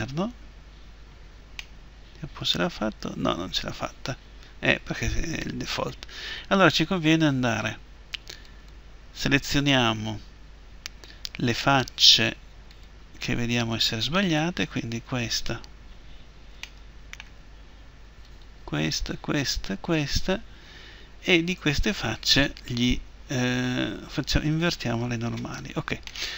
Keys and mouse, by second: 1.4 click, 8.2-12.3 right drag, 12.5-14.3 drag, 14.3-18.0 right drag, 18.0-20.8 middle drag, 20.8-22.9 right drag, 24.4-26.1 drag, 26.1-26.3 middle drag.